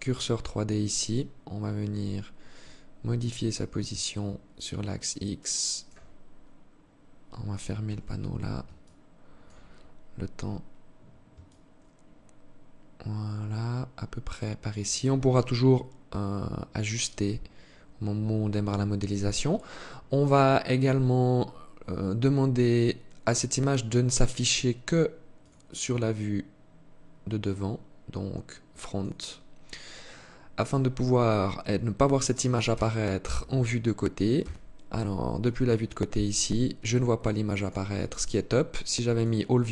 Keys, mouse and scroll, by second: 0.3 scroll down 1, 2.8 click, 5.7-7.3 scroll up 4, 7.3 t, 8.3 alt+shift+click, 10.9 shift+click, 14.9 shift+click, 18.5-19.1 scroll down 1, 19.1-19.7 scroll down 2, 19.7-20.9 scroll down 1, 20.9 scroll down 2, 23.5 click, 24.8 click, 32.1 KP_3, 33.7 KP_3, 35.1 alt+shift+click, 36.9 click.